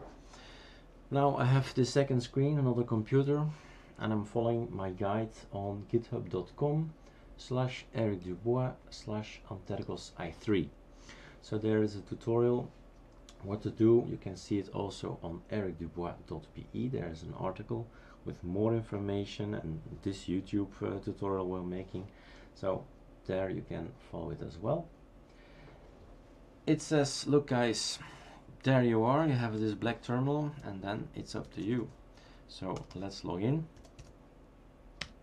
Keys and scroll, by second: 31.1-32.9 typing.